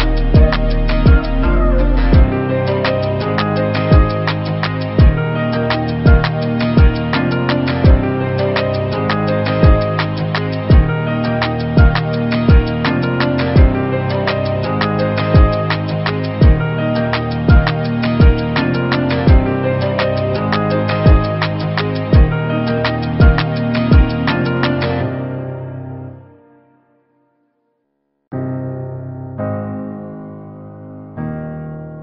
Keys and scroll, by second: 19.6 ctrl+d, 20.4 v, 24.1 ctrl+-, 27.6 ctrl+BackSpace.